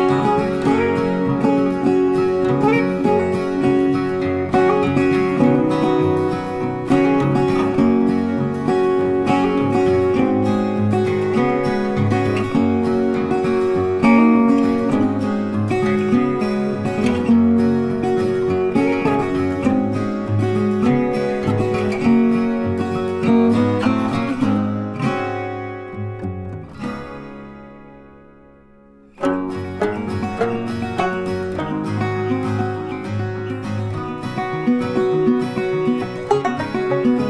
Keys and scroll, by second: 1.3 ctrl+t, 23.1 ctrl+t.